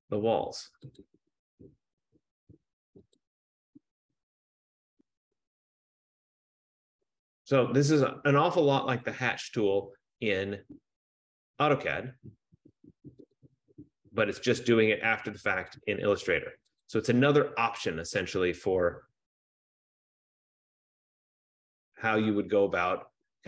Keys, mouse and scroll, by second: 0.1 click, 3.4 click, 5.0 click, 7.4 click, 9.4 click, 11.3 click, 13.4 click, 14.5 click, 15.9 click, 16.9 click, 19.1 click, 20.6 click, 21.7 click.